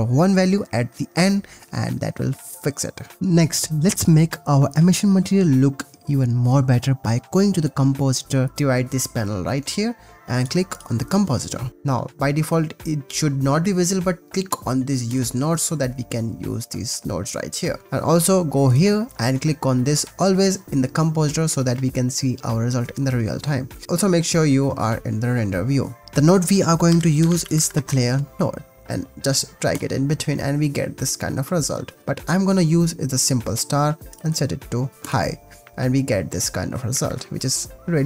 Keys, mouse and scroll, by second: 0.8 ctrl+s, 2.9 shift+click, 3.0 shift+middle click, 10.3 click, 10.7-11.7 drag, 15.1 click, 18.7-21.2 drag, 23.8 ctrl+s, 26.0 shift+a, 29.7 click, 31.4 click, 32.0-33.3 drag, 34.1-35.2 drag, 36.9 ctrl+s.